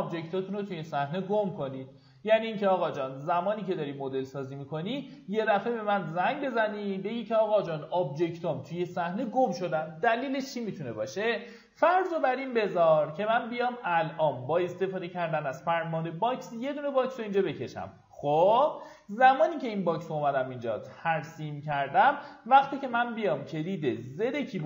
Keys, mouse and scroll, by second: 12.0 middle click, 12.3 alt+w, 12.9-13.3 scroll down 1, 13.5 ctrl+right click, 14.8-17.5 drag, 17.7 right click, 20.1 click, 20.7 g, 22.5 g, 24.5 z.